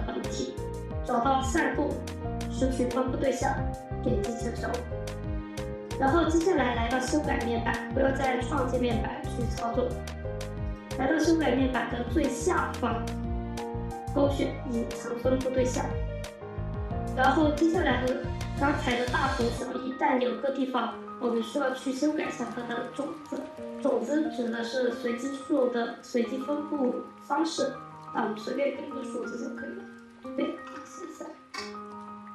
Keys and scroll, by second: 30.2-31.3 typing, 31.4 Return.